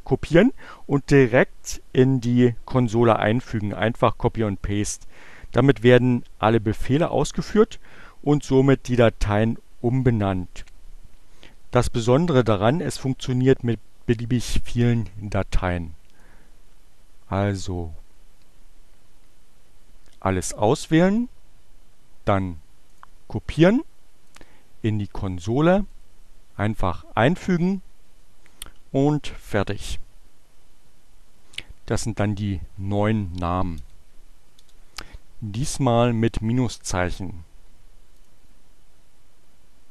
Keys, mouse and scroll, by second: 16.1-17.4 drag, 19.9-21.5 right drag, 22.8 click, 24.3 click, 25.6 right click, 27.2 click, 31.9-32.8 typing, 34.7 Return, 38.2 click.